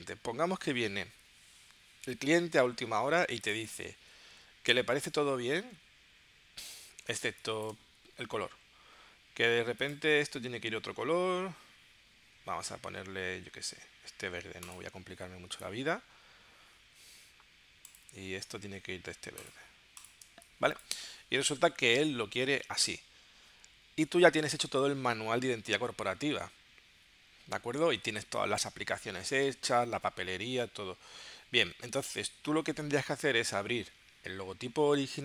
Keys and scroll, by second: 7.2 space, 20.2 space.